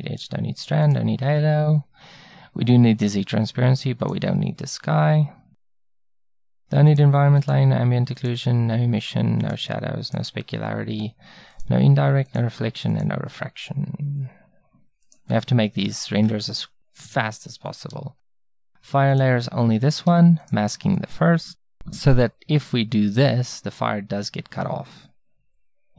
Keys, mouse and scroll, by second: 5.7-11.7 drag, 15.8-17.0 drag, 22.7 middle click, 25.4 middle click.